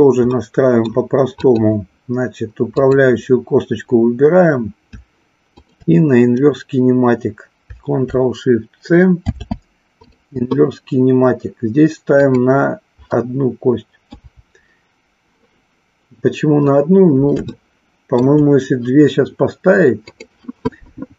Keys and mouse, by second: 0.4 middle click, 1.3-4.0 drag, 5.6-7.0 shift+drag, 9.2 ctrl+shift+c, 12.3 click, 17.5-18.3 shift+middle drag, 20.1 click.